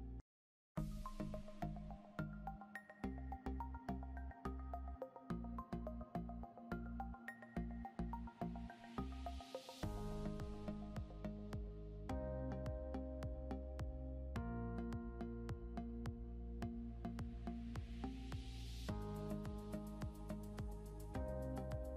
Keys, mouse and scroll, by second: 1.1 click, 3.7 scroll down 1, 4.4 scroll up 2, 5.4 click, 13.5-15.7 typing, 17.4 Return, 19.3 scroll down 1, 20.3 ctrl+z, 21.5 scroll up 1.